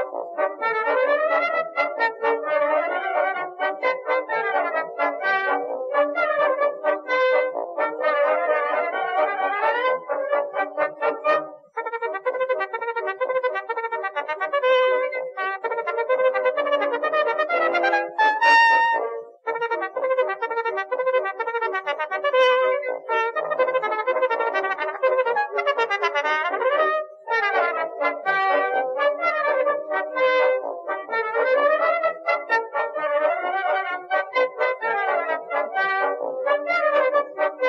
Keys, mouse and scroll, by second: 0.3 middle click, 1.1 middle click, 1.6 ctrl+r, 2.7 ctrl+r, 3.9 ctrl+r, 5.0 ctrl+t, 5.4 ctrl+r, 7.0 middle click, 8.4 ctrl+r, 9.6 ctrl+r, 10.6 middle click, 12.3 KP_3, 13.5 z, 13.8 a, 13.9 c, 15.1 middle click, 15.9 KP_3, 16.0 z, 16.5 s, 17.9 a, 18.1 Tab, 20.2 Tab, 21.5 ctrl+r, 22.6 middle click, 23.0 ctrl+r, 23.9 middle click, 24.2 middle click, 25.1 middle click, 25.2 middle click, 25.9 ctrl+r, 27.3 ctrl+r, 29.5 ctrl+r, 30.0 middle click, 30.5 ctrl+r, 31.4 ctrl+r, 32.4 ctrl+r, 33.7 middle click, 34.1 middle click, 34.2 click, 34.3 middle click, 34.5-35.9 right drag, 36.5 middle click, 36.6 click.